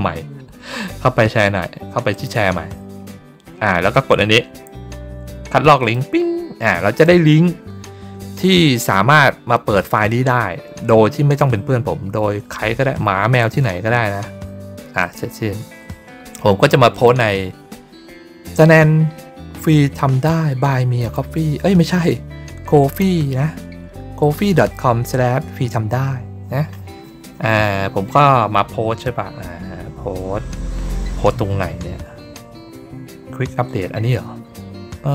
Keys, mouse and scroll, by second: 2.0 click, 5.7 click, 14.9 click, 16.8 click, 18.5 middle click, 19.5 middle click, 19.8 scroll up 2, 26.0 scroll down 2, 28.2-28.7 scroll up 2, 28.7 scroll down 2, 29.4-30.0 scroll down 2, 30.0-30.4 scroll down 1, 30.4-31.3 scroll up 2, 31.3-31.8 scroll down 2, 33.9-34.7 scroll up 2, 34.7-35.1 scroll down 2.